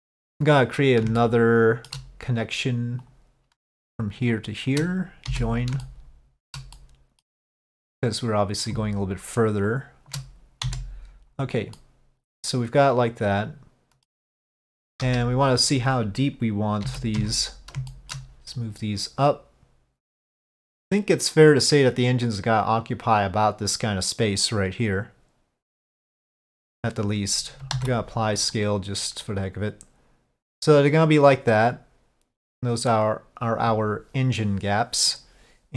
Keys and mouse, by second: 1.3 shift+middle click, 3.1 click, 5.9 middle click, 6.8 middle click, 8.2 click, 9.8 shift+click, 11.9-14.1 middle drag, 15.0 KP_5, 16.9 z, 18.0 shift+middle click, 18.2 ctrl+z, 18.6-26.8 drag, 27.8 ctrl+a, 29.3-35.3 middle drag.